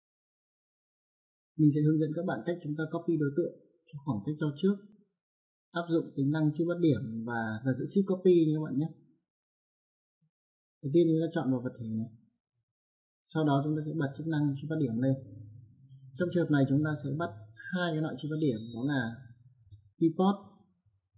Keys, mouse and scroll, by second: 0.5 click, 11.3 click, 14.8 click, 17.6 right click, 19.8 click, 20.9 click.